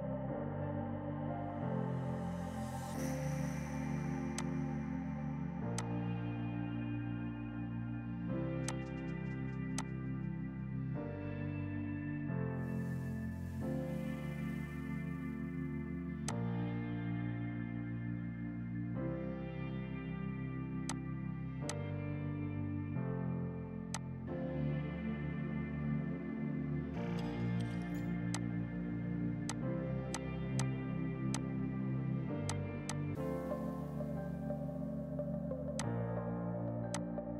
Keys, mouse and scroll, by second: 0.3 shift+Right, 2.4 right click, 4.4 click, 8.6 alt+Num_Lock, 8.7 click, 12.5 shift+Down, 15.3 F3, 16.3 click, 16.8 F4, 19.2 F4, 20.9 alt+click, 23.6 F2, 24.0 click, 28.3 click, 35.8 click.